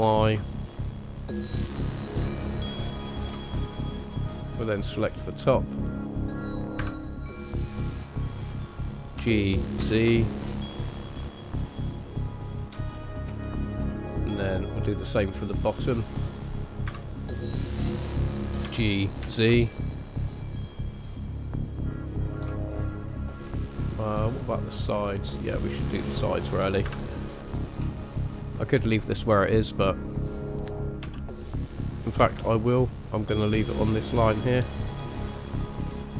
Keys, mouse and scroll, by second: 3.5-3.9 scroll down 2, 4.0 middle click, 5.7 click, 6.8 KP_1, 7.5-8.7 scroll up 4, 9.2 g, 12.9-13.4 scroll down 2, 13.4 shift+middle click, 13.9 middle click, 14.7 click, 15.8 click, 16.9 KP_1, 17.4 scroll up 2, 18.7 g, 22.7-23.6 scroll down 5, 23.6 shift+middle click, 24.2 middle click, 25.9 click, 26.8 KP_1, 27.4-27.8 scroll up 2, 28.0 shift+middle click, 31.0 g, 32.6 scroll up 1, 33.2-34.0 scroll up 1, 35.7 scroll down 1.